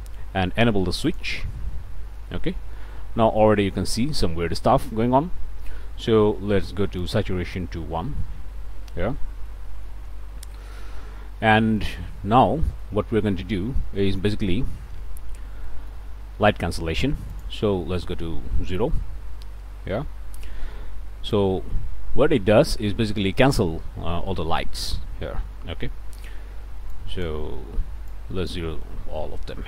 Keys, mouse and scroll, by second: 1.0 click, 2.3-2.6 scroll up 2, 3.4 click, 7.0 click, 7.6 1, 9.1 scroll up 1, 9.5 middle click, 11.8-13.0 middle drag, 13.2-14.6 middle drag, 15.1-15.4 scroll up 1, 15.6 middle click, 17.3 click, 17.8 0, 18.5 Return, 19.1 ., 21.5 middle click, 22.5 click, 23.3 middle click, 26.9 click, 28.1 click.